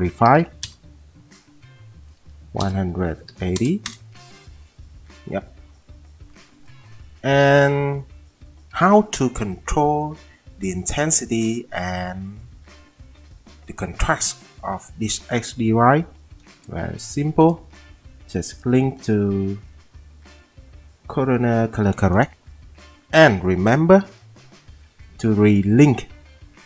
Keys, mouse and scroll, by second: 0.3 typing, 0.7 Return, 1.9-5.8 typing, 24.0 F10.